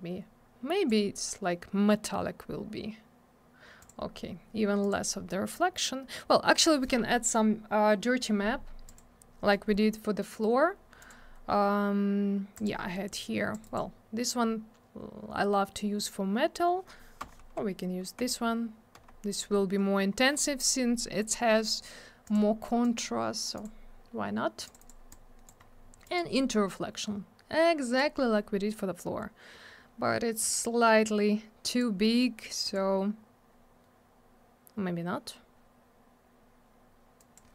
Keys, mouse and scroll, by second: 3.8 click, 3.9 click, 4.8 click, 4.9 click, 8.8 click, 9.0 click, 10.2 middle click, 11.0 click, 11.1 click, 12.5 click, 12.6 click, 13.5 click, 13.6 click, 13.6 click, 13.7 double click, 17.2 Left, 22.2 click, 22.3 click, 22.8 click, 23.5 click, 23.6 click, 24.6 click, 24.7 click, 24.8 click, 24.9 click, 25.1 click, 25.6-25.9 scroll up 1, 26.0 click, 26.1 click, 26.7 click, 30.6 click, 32.0 middle click, 32.2 middle click, 32.6 click, 32.7 click, 37.2 click, 37.3 click.